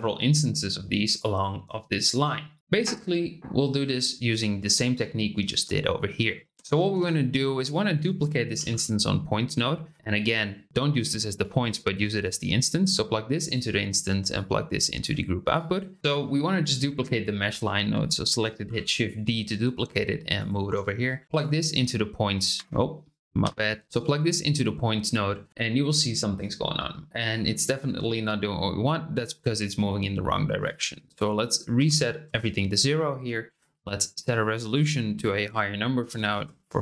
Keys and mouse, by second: 0.4 click, 1.1 click, 1.9 click, 2.6 ctrl+z, 6.5 shift+middle click, 8.5 shift+d, 11.4 ctrl+click, 12.2-13.5 drag, 14.3-15.0 drag, 15.6 click, 16.0 x, 16.0 shift+a, 18.6 shift+d, 21.0 click, 22.5 Escape, 23.4 Delete, 23.8 click, 30.7-32.7 drag, 34.2-36.8 drag.